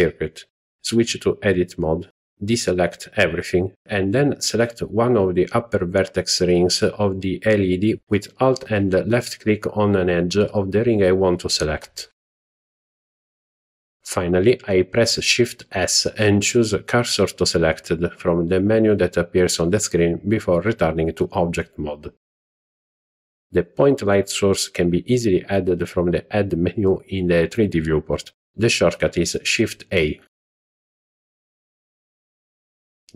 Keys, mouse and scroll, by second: 3.3 alt+click, 11.4 shift+s, 19.6 Tab, 20.5 scroll down 1, 25.2 shift+a.